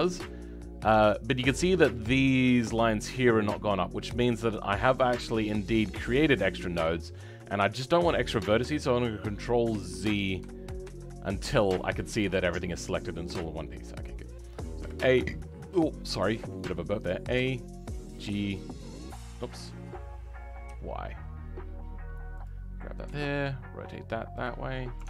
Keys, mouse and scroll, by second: 6.1 e, 10.8 ctrl+z, 12.5-13.3 scroll down 10, 13.3-14.7 shift+middle drag, 14.7 a, 15.2 shift+middle click, 15.8 scroll down 3, 16.1-17.4 shift+middle drag, 17.4 g.